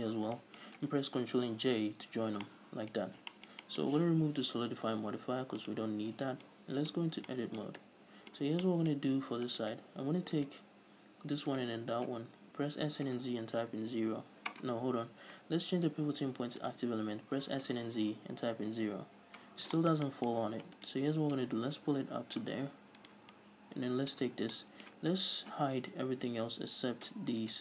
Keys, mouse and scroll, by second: 0.5 scroll down 2, 0.7-5.9 shift+middle drag, 1.8 ctrl+j, 3.3-3.7 scroll up 2, 5.9 click, 6.8-8.7 middle drag, 7.3 Tab, 8.8 scroll down 2, 9.0 shift+middle click, 9.3-10.0 scroll up 2, 9.4 middle click, 10.0 right click, 11.8 shift+right click, 12.7 s, 14.9 right click, 16.1 ., 17.6 s, 19.2 Return, 19.8 scroll up 2, 20.1-21.1 shift+middle drag, 21.1 right click, 21.7-23.4 drag, 23.4 right click, 23.7-27.6 middle drag, 24.6 Tab, 24.7 scroll down 2.